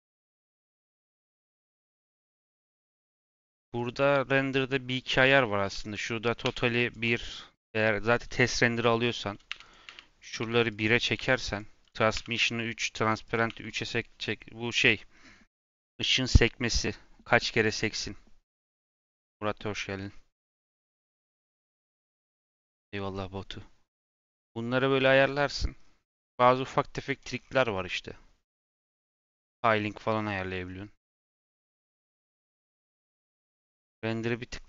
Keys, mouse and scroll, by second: 0.2-9.8 drag, 9.8 1, 10.1-16.2 drag, 25.4-26.9 scroll down 4, 26.9 click, 27.3-27.8 scroll down 3, 27.8 scroll down 3, 28.5-30.1 scroll down 3, 30.1-31.1 scroll down 5, 31.1 click, 31.4-33.4 scroll down 15, 33.4 scroll up 5, 33.7-34.2 scroll down 8, 34.2-34.6 scroll up 14.